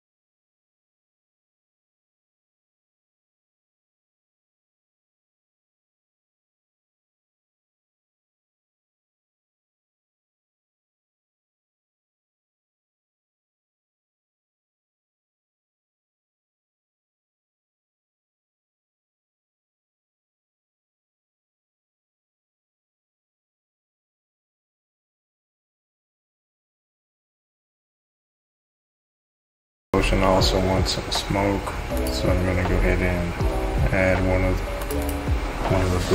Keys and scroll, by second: 0.4-1.7 typing, 15.1 Home, 18.1 space, 27.7 space, 27.9 Home.